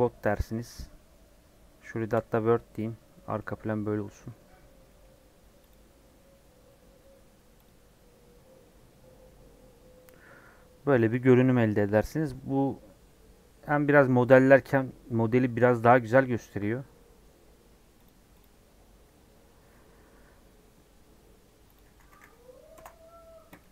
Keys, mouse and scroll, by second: 3.1 scroll down 4, 3.4 middle click, 4.3-4.7 scroll up 4, 4.9-10.9 middle drag, 10.9 click, 11.1 scroll down 2, 11.2 middle click, 11.8 scroll up 3, 23.6-23.7 middle drag.